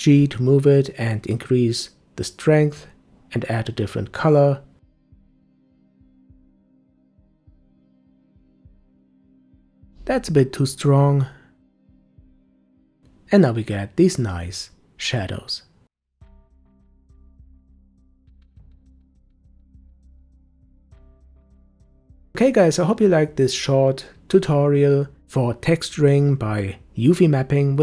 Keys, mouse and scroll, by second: 0.0-1.0 middle drag, 1.0-2.5 scroll up 6, 2.5 click, 6.7-8.9 drag, 8.9 0, 10.9-12.1 drag, 12.1 0, 13.4-14.4 scroll down 4, 14.4-15.5 middle drag, 15.5 g, 17.3-18.1 middle drag, 18.1 g, 20.3-23.9 middle drag.